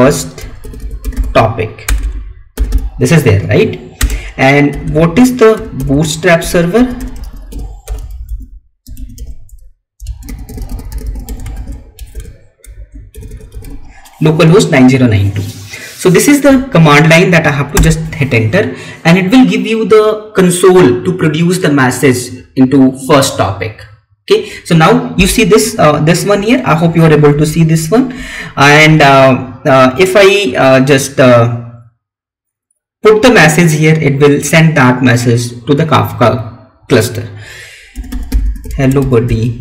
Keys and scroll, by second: 3.9 space.